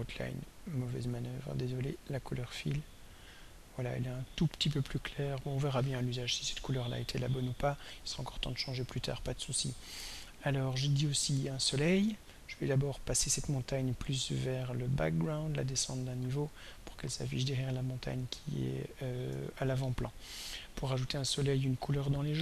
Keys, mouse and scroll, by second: 1.2 right click, 2.8 click, 8.8 click, 15.7 click, 18.3 click, 21.8 click.